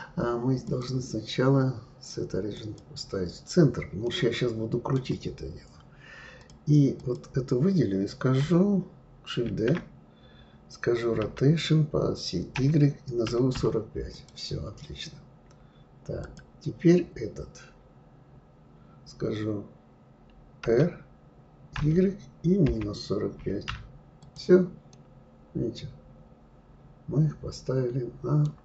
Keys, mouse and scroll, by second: 0.6-3.6 drag, 4.0-6.4 middle drag, 6.4 click, 6.9 click, 9.4 shift+d, 16.2 click, 20.6 r, 24.9-28.0 middle drag.